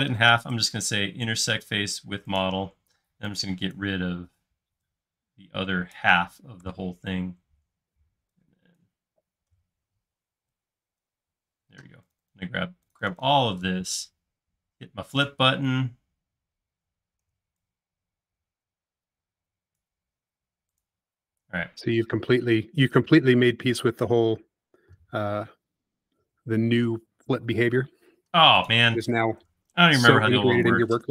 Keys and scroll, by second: 3.0 e, 4.1 typing, 6.7 BackSpace, 9.5 BackSpace, 10.2 e, 11.4 space, 14.1 typing, 20.4 space, 29.4 BackSpace.